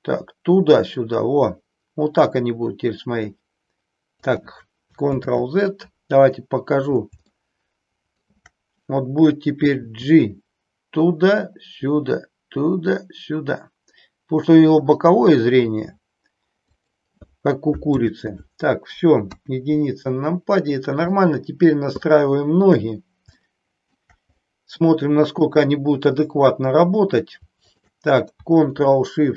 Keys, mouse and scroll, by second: 5.2 ctrl+z, 7.4-8.2 shift+middle drag, 9.9 g, 17.9 ctrl+z, 19.2 KP_1, 21.2 middle click, 22.0 shift+middle click, 23.5 shift+middle click, 24.4 middle click, 25.4-26.9 drag, 27.7-28.9 shift+drag.